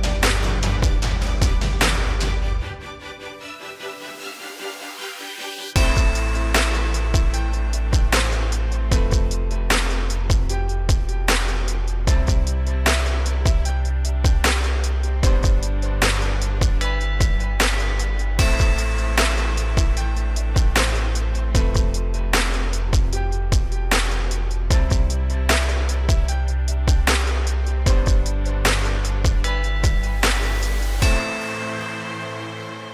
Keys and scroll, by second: 5.2 ctrl+g.